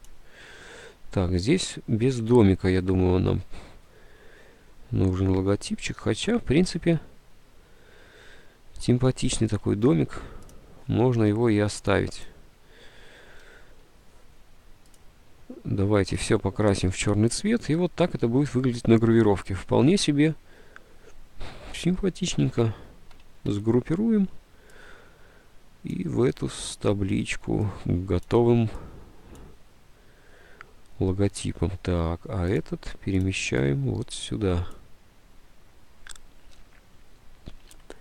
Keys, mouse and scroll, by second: 9.4 ctrl+u, 13.5 ctrl+u, 23.5 ctrl+g, 37.8 alt+Tab.